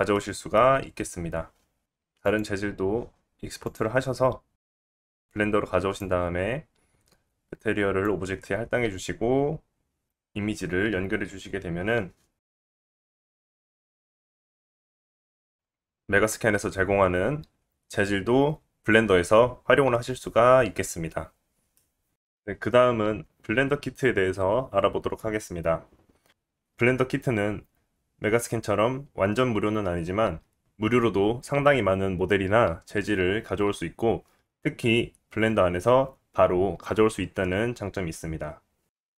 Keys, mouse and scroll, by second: 1.3 scroll down 1, 1.3-4.9 right drag, 1.8 middle click, 1.8-3.5 scroll up 1, 5.6 click, 7.4-8.6 right drag, 8.6-9.6 drag, 9.6 g, 10.2-15.5 drag, 10.7 scroll up 2, 15.2-15.5 middle drag, 15.2 right drag, 15.6-20.9 middle drag, 21.7-22.1 middle drag.